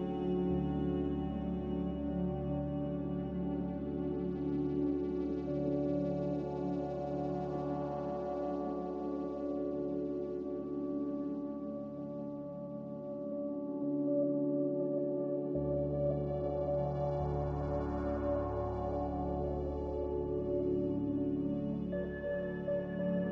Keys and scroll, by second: 2.7 z, 9.8 Delete, 11.4 Delete, 13.9 z, 15.3 s, 16.9 s, 19.4-20.8 typing, 20.8 Return.